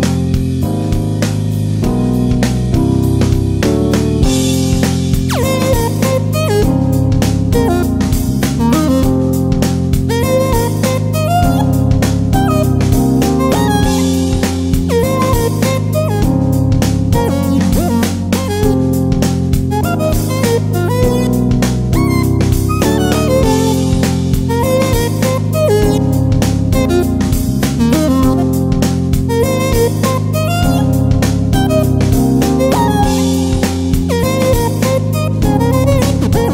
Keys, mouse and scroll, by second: 0.9-12.6 alt+shift+drag, 17.0 click, 19.4-23.4 drag, 26.6-36.5 drag.